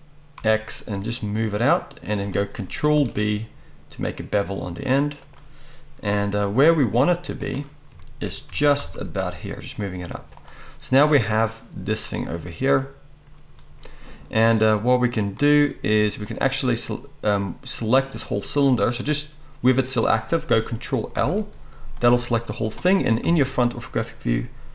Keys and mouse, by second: 2.2-7.4 middle drag, 2.9 ctrl+b, 7.4-9.9 drag, 8.5 g, 9.9-19.1 middle drag, 10.1 z, 15.9 z, 19.1-24.7 drag, 21.2 ctrl+l, 22.1 g, 23.2 KP_1.